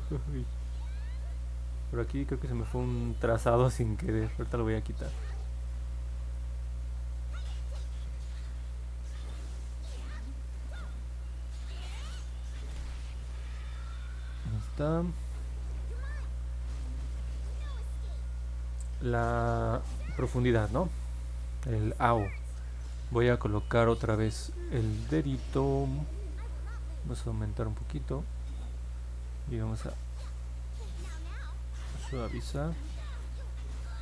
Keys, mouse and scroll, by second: 0.8 alt+middle click, 2.5 alt+click, 4.0 alt+click, 4.8 alt+middle click, 5.6 alt+click, 6.6 alt+middle click, 10.9-14.3 drag, 16.3 middle click, 16.8-18.1 alt+drag, 18.5 middle click, 18.5 scroll up 2, 19.1 alt+middle click, 29.7 click, 31.0 click, 31.8 click, 33.1 click, 33.7 click.